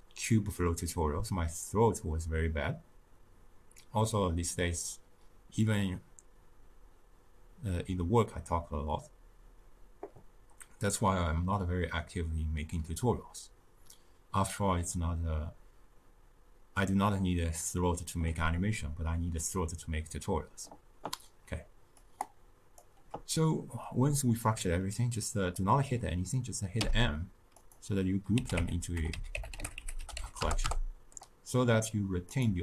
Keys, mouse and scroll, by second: 24.0-30.4 drag, 30.6 Return.